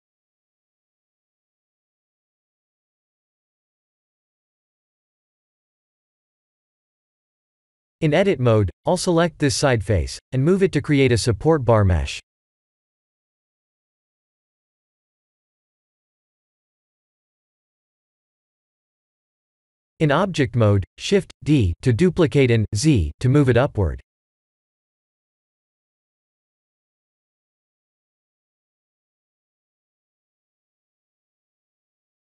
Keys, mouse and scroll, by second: 1.4 g, 4.6 s, 6.4 middle click, 7.2-7.6 scroll up 4, 7.6 shift+middle click, 8.7 g, 10.2 Tab, 10.5 3, 11.0 click, 12.7 click, 13.6-14.1 scroll down 2, 14.1-15.0 scroll down 1, 14.1 KP_1, 15.6 click, 19.4 Tab, 20.8 shift+d, 27.7 shift+d, 31.4 ctrl+z, 32.1 shift+middle click.